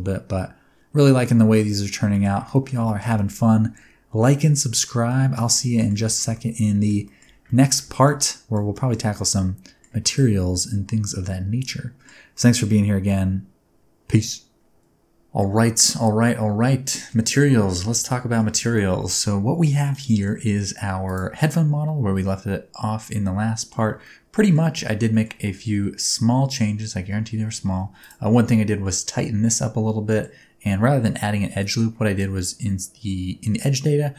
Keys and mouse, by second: 2.1 shift+middle click, 2.4 ctrl+middle click, 2.8 shift+middle click, 3.1-4.8 middle drag, 5.0 middle click, 5.5-5.8 ctrl+middle drag, 6.0 shift+middle click, 6.3-6.8 middle drag, 7.0 shift+middle drag, 7.4 ctrl+middle click, 7.9 shift+middle click, 8.2 middle click, 8.7 shift+middle drag, 9.2-9.8 ctrl+middle drag, 10.1-12.0 middle drag, 12.3 middle click, 16.0-17.1 middle drag, 17.7 middle click, 18.1-18.4 middle drag, 18.6 middle drag, 19.0-20.2 middle drag, 20.5 middle click, 21.4-23.7 middle drag, 24.0-24.5 ctrl+middle drag, 25.1 shift+middle click, 25.4-26.1 middle drag, 26.9 Tab, 27.7 2, 28.3-30.2 middle drag, 31.1 middle click.